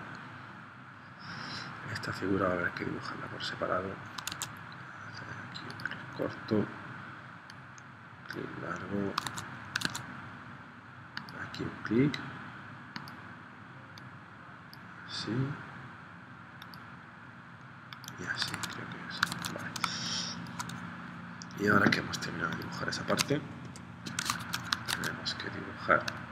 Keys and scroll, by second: 4.3 super+Tab, 9.3 super+Tab, 18.5 super+Tab, 19.4 super+Tab, 19.8 space, 23.7 p, 24.9 super+Tab.